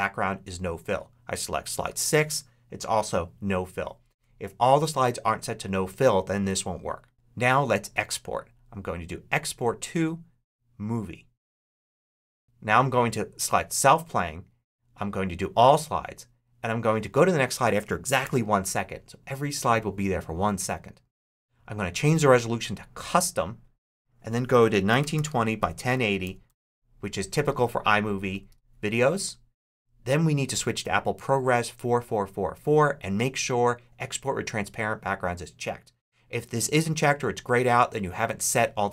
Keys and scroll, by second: 18.1 1, 24.4-26.8 typing, 28.3 Tab.